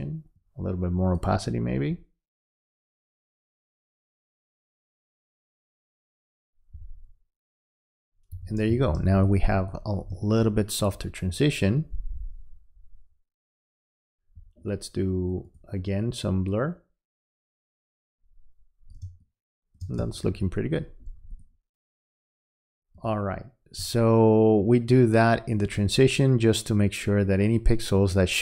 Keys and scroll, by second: 8.4 v, 19.0 space.